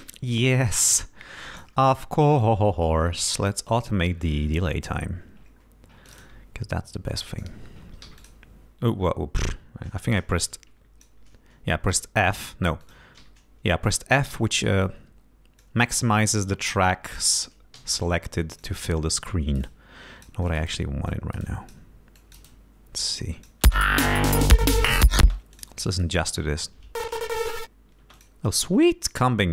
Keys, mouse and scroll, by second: 1.0 click, 2.4 click, 6.1 click, 7.1 click, 8.1 f, 8.2 click, 9.5-11.3 drag, 12.0 f, 12.9 click, 13.3 f, 14.9-15.9 drag, 16.8 click, 17.8 d, 18.6 ctrl+click, 19.7-20.8 drag, 21.2 click, 22.2 click, 23.1 click, 23.7 space, 25.3 space, 25.6 click, 25.9 click, 26.3 space, 28.1 space, 28.2 click, 29.1-29.5 drag.